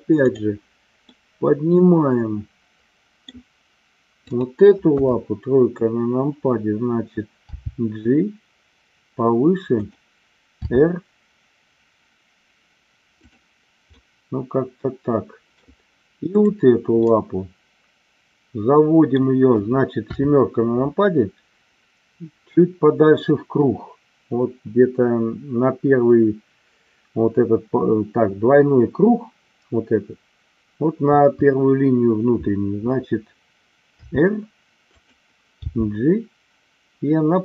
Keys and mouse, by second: 0.2 click, 1.1-2.8 middle drag, 2.9 middle click, 4.2 click, 5.2 KP_3, 7.5 g, 10.7 r, 12.1 click, 13.1 click, 14.0-15.6 middle drag, 16.3-16.8 drag, 17.1-19.2 middle drag, 20.0 KP_7, 30.9 KP_3, 34.1 r, 34.8 click, 35.6 g.